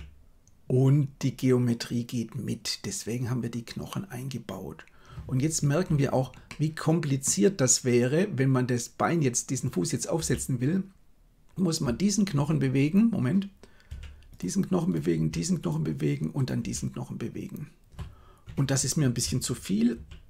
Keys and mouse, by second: 6.4-7.2 middle drag, 10.1 r, 13.9 r, 15.1 r, 16.7 r, 19.9 ctrl+z.